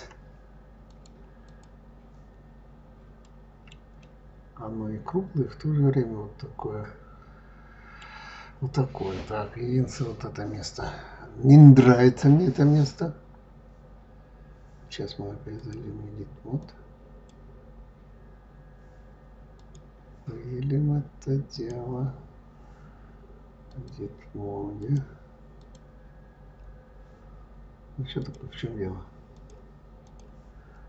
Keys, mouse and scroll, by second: 0.7-1.4 drag, 2.6 scroll down 2, 3.0 scroll up 1, 3.0-6.9 middle drag, 15.4-18.4 drag, 19.4 click, 21.4 click, 23.5 click, 24.6 click, 25.4 click, 28.0 click, 29.2-30.8 drag.